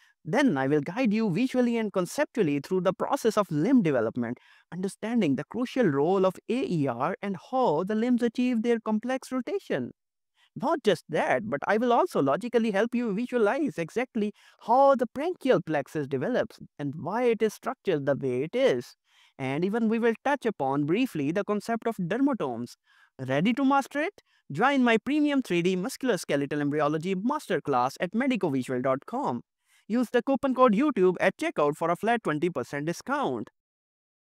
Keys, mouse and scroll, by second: 5.5 middle click, 7.3 middle click, 8.7 middle click.